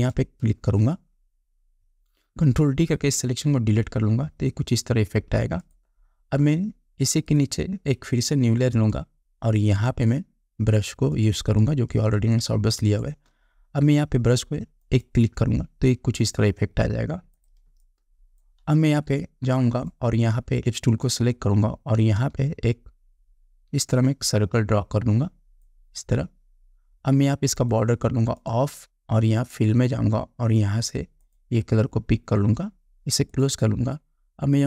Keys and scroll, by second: 4.0 ctrl+d, 12.6 space, 18.1 space.